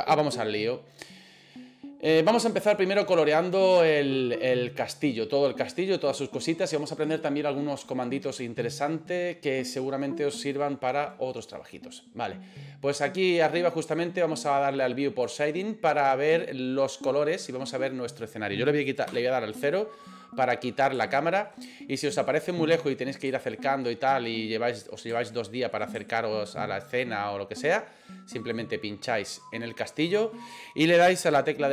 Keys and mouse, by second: 15.9 click, 19.1 KP_0, 20.0 middle click, 21.1 shift+middle click, 21.6 middle click, 23.3 shift+middle click, 23.8 shift+middle click, 24.4 middle click, 25.2 shift+middle click, 26.0-27.6 ctrl+middle drag, 28.4 right click.